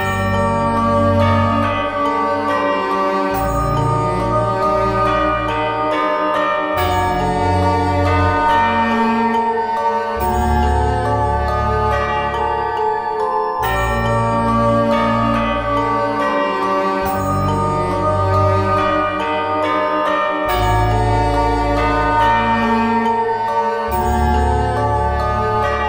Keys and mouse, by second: 0.4 middle click, 0.9 ctrl+Tab, 2.8 f, 6.6 f, 8.8 f, 9.6 Tab, 12.7 Tab, 14.6 g, 16.5 Tab, 20.0 KP_1, 20.9 Tab, 25.4 s.